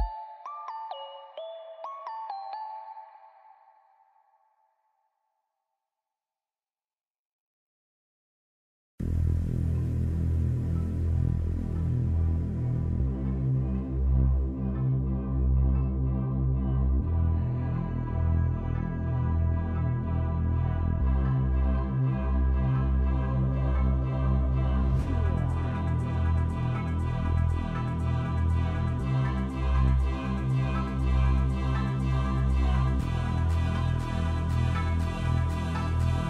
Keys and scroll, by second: 12.1-14.6 typing, 14.6 Return, 16.2-19.8 typing, 18.6 Return, 25.3 e.